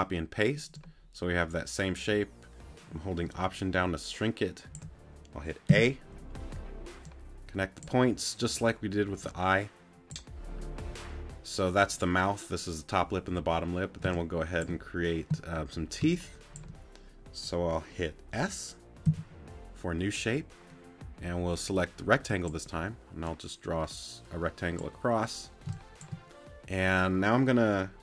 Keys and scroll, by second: 14.0 space, 16.0 space, 19.0 s, 25.7 space.